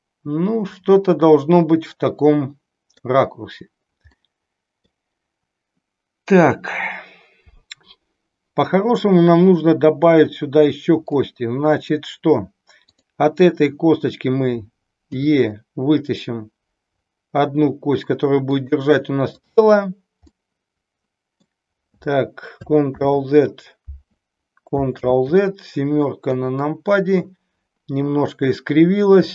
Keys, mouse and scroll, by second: 4.2 middle click, 11.1 middle click, 12.8 click, 15.1 e, 18.5 click, 19.3 click, 20.3-21.5 middle drag, 22.8 ctrl+z, 24.9 ctrl+z, 26.2 KP_7, 29.2 e.